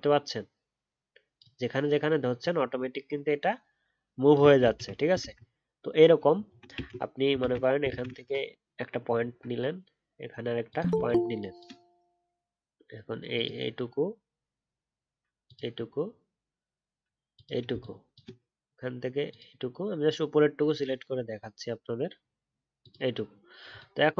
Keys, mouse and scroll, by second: 4.6 ctrl+z, 5.2 ctrl+z, 6.4-6.7 alt+scroll up 1, 6.7 ctrl+z, 7.4 ctrl+z, 7.8 ctrl+z, 9.1-11.1 alt+scroll down 1.